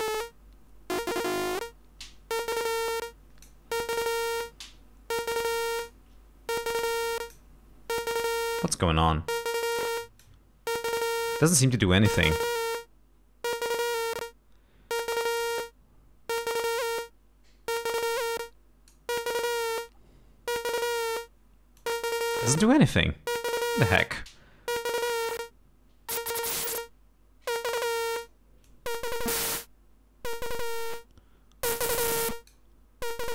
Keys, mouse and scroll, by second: 5.5 click, 6.8 click, 9.0-10.4 drag, 12.2-19.2 drag, 21.9-23.2 drag, 25.0-28.5 drag, 28.7-32.8 drag.